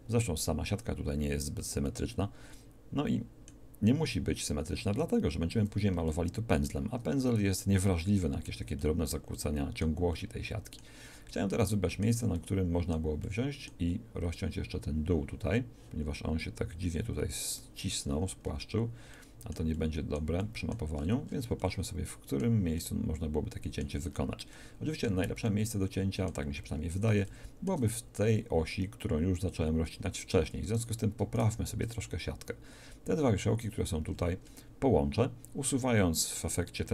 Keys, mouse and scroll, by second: 16.2 middle click, 25.2 a, 30.7-34.1 right drag, 34.3-36.9 middle drag.